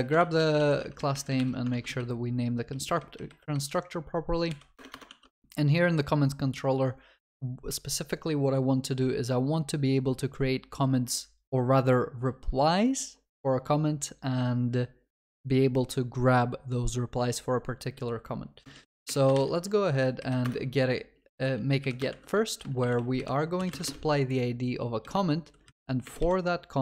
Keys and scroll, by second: 0.2 ctrl+w, 0.4 ctrl+v, 0.6 ctrl+s, 1.4 ctrl+y, 20.5 Return.